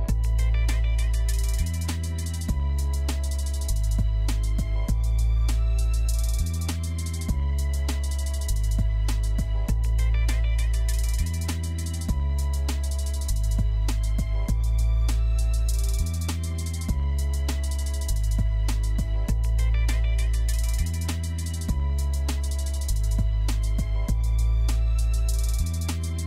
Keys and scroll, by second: 16.7 1.